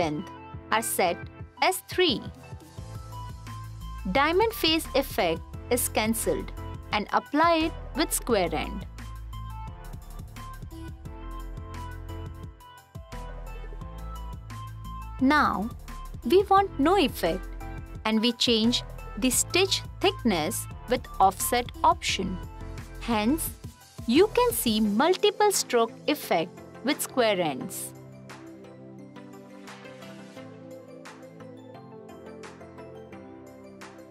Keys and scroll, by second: 11.5 f, 16.1 f, 24.6 t, 25.8 t, 28.0 f, 30.7 f.